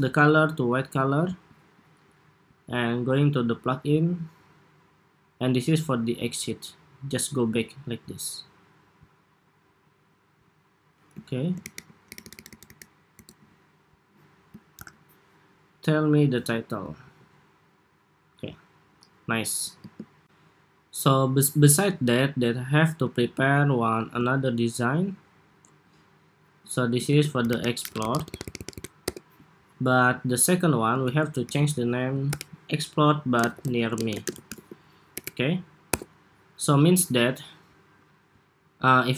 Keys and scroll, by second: 11.3 alt+shift+Right, 11.9 alt+Right, 12.5 alt+Right, 13.0 alt+Right, 14.6 super+-, 16.7 super+s, 26.8 super+r, 30.7 super+r.